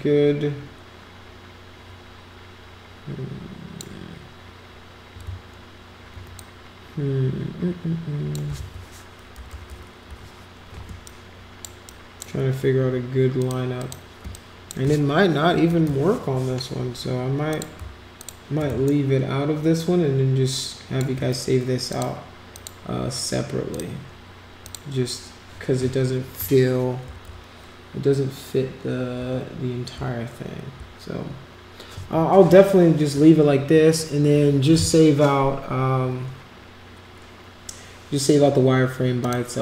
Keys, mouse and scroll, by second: 6.3-8.3 drag, 9.5 ctrl+=, 10.0 ctrl+-, 10.8 space, 11.0 click, 11.9 click, 13.4 click, 13.8 click, 14.2 space, 14.3 click, 17.5 click, 18.1 shift+click, 18.8-21.0 shift+drag, 21.9 click, 22.5 click, 23.7 click, 24.6 click, 27.2 ctrl+=, 29.2 ctrl+-, 29.9 ctrl+=, 39.2 click.